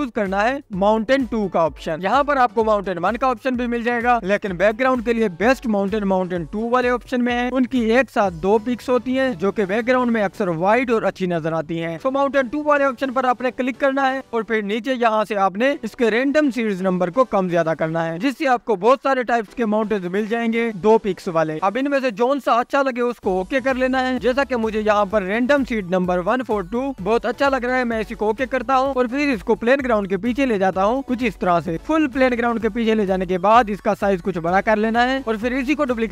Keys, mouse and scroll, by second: 8.2-9.1 scroll up 2, 9.1-9.7 scroll down 1, 9.7-10.3 scroll down 1, 10.3-10.9 scroll down 1, 10.9-12.1 scroll down 1, 18.1-25.5 drag, 29.0 click, 30.7 click, 31.8-32.3 drag, 32.3-32.7 scroll down 1, 32.7-33.1 drag, 33.9 s, 35.0 click.